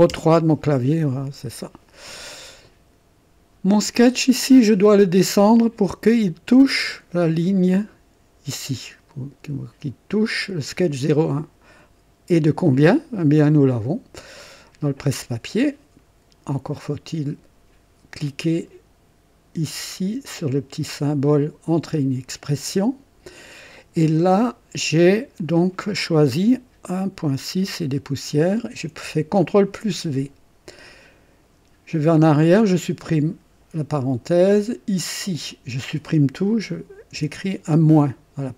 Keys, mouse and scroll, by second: 0.1 KP_3, 1.0-2.0 right drag, 4.0 click, 14.4 click, 15.2 click, 22.0 click, 25.4 click, 27.6 click, 29.7 ctrl+v, 32.5 BackSpace, 32.7 BackSpace, 34.7 click, 37.2 -.